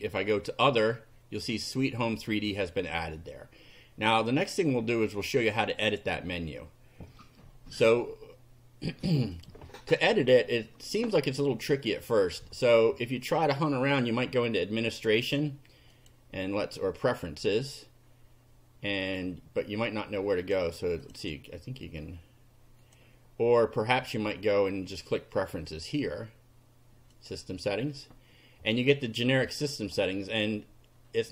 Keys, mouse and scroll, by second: 5.9 click, 9.3 click, 15.9 click, 20.3 click, 21.0 click, 22.9 click, 27.1 click, 29.5 click.